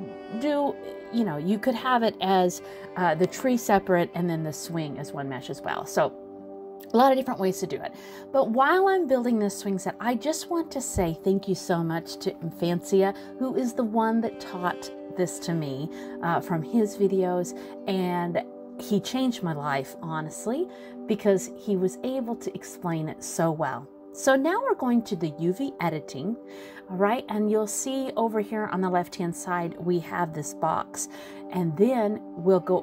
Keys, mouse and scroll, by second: 0.2 middle click, 0.3-1.1 scroll up 2, 1.1 middle click, 3.2 click, 4.2 l, 5.2 click, 7.9 shift+d, 8.8 click, 10.7 scroll down 3, 11.0 middle click, 11.7 click, 12.1 middle click, 13.4 middle click, 14.0 shift+middle click, 14.3 scroll up 2, 14.7 middle click, 16.4 scroll down 1, 16.6 middle click.